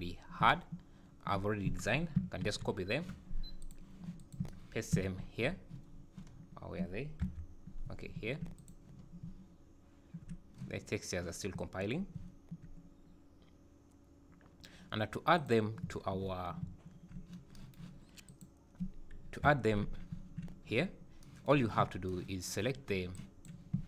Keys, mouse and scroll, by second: 4.2 click, 5.3 ctrl+v, 5.9-6.4 scroll down 7, 7.2 KP_Decimal, 8.0 scroll down 2, 8.2 `, 8.6 click, 8.9-9.3 scroll up 6, 9.3 `, 11.5 `, 12.1 `, 15.4 click, 15.8 `, 16.6 `, 17.1 scroll down 5, 18.3 click, 19.2 KP_Decimal, 19.8 alt+a, 20.1 `, 21.6 scroll down 6, 22.7 scroll down 3, 23.1 click.